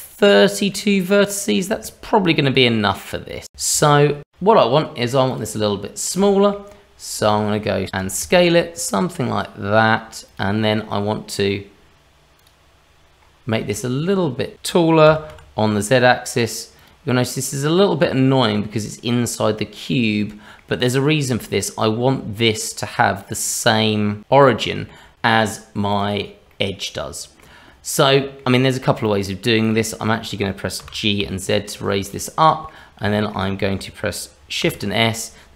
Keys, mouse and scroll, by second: 0.4-0.7 scroll up 2, 0.7 middle click, 1.8 shift+middle click, 2.3 middle click, 3.5 scroll down 1, 3.8 middle click, 3.9 middle click, 5.3 click, 5.9 scroll down 1, 6.5 shift+middle click, 6.7-7.2 scroll up 2, 7.2 shift+middle click, 8.0 s, 10.6 middle click, 12.4 click, 13.2-13.6 scroll up 2, 13.7 shift+middle click, 15.0 s, 17.5 middle click, 19.9 middle click, 23.4 click, 24.5 middle click, 25.1 middle click, 25.9 click, 26.5 middle click, 27.9 middle click, 29.0 click, 29.6 click, 30.0 middle click, 30.7 g, 32.4 middle click, 33.1 shift+middle click, 34.6 shift+s.